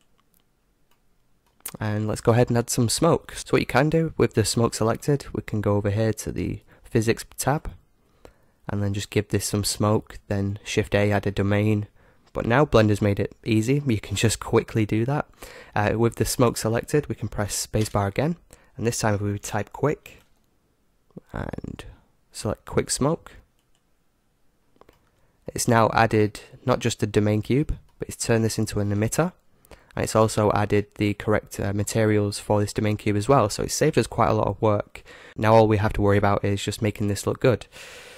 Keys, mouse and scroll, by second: 0.0-2.5 drag, 0.9-2.8 middle drag, 5.6-7.4 scroll down 1, 7.4-10.1 drag, 16.4-18.2 right drag, 17.8 space, 24.6-26.8 middle drag, 27.6-29.5 middle drag, 29.0-30.7 right drag, 32.5-34.9 right drag.